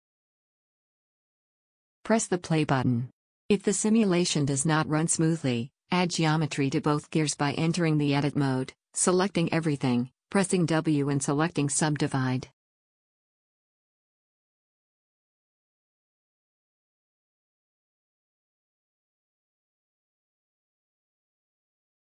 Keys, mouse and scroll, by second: 0.6-3.0 drag, 7.0-9.9 drag, 9.9 Tab, 10.3 a, 10.5 a, 12.1 w, 14.5 Tab, 15.2 click, 15.7 Tab, 16.2 a, 16.5 a, 17.2 w, 18.7 Tab, 20.2-22.0 drag.